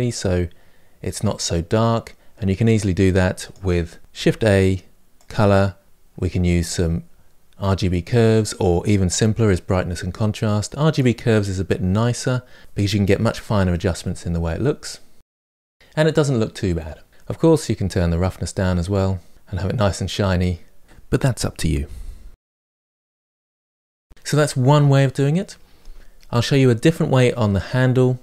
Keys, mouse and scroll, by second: 10.0-13.6 drag, 13.6-14.6 middle drag, 14.6 scroll down 1, 14.8-16.3 middle drag, 17.1 middle click, 17.7-19.5 drag, 21.4-24.1 middle drag.